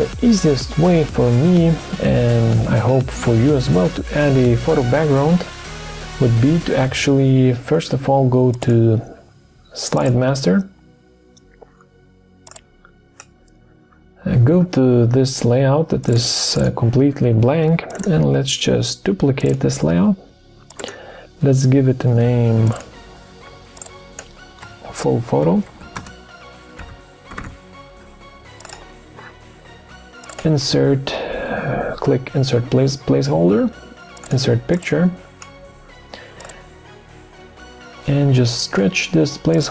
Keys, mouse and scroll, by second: 24.6 Caps_Lock, 24.9-27.9 typing.